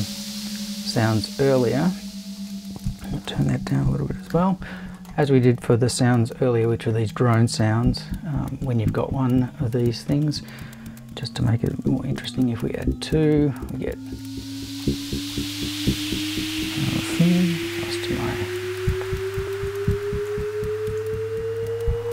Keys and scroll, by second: 3.7 Right, 4.0 BackSpace, 4.3 5, 11.9 super+c, 12.2 super+v, 17.3 shift+super+t.